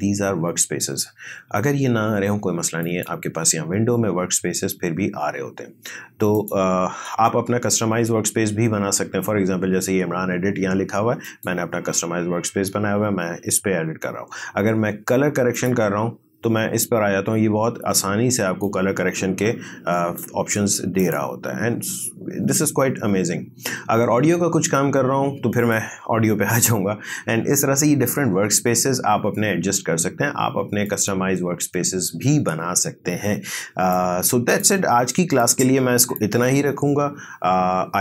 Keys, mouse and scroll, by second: 2.8 click, 6.3 click, 7.3 click, 11.2 click, 11.9 click, 15.5 click, 18.8-21.0 drag, 21.7 scroll down 1, 25.6 click, 30.9 click, 33.9-37.2 drag.